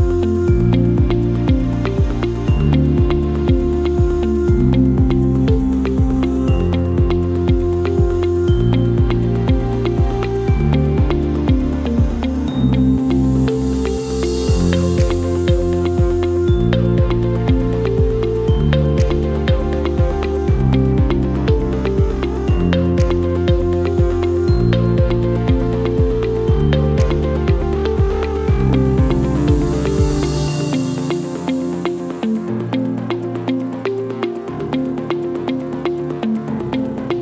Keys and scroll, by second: 21.5 ctrl+space, 33.7 KP_1, 33.8 KP_6, 33.9 KP_5, 34.2 Return.